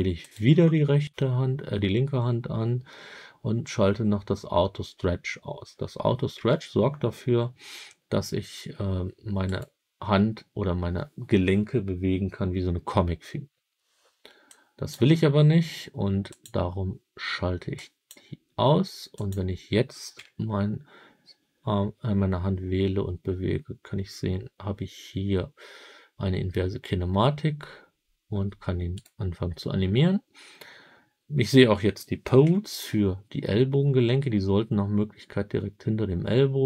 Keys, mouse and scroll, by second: 0.1 click, 6.3 g, 9.4 right click, 14.4-14.8 drag, 16.2 click, 17.6 click, 19.0 click, 20.1 g, 28.9 right click, 32.3 KP_7.